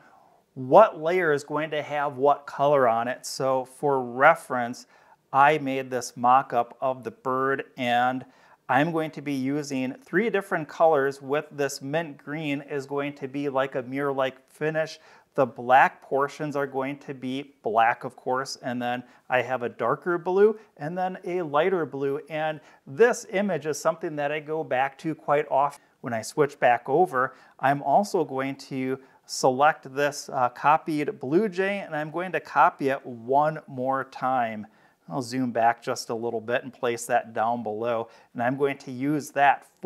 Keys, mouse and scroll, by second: 4.8 click, 7.2 click, 26.5 scroll down 2, 26.8 scroll up 2, 28.0-29.2 drag, 32.0 ctrl+c, 34.4 scroll down 2, 35.8-37.3 drag, 37.9 click.